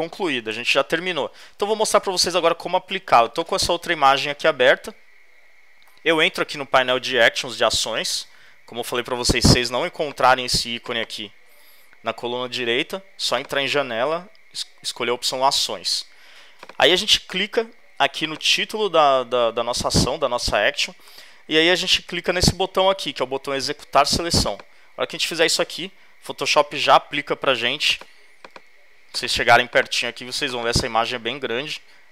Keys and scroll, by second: 27.4 z.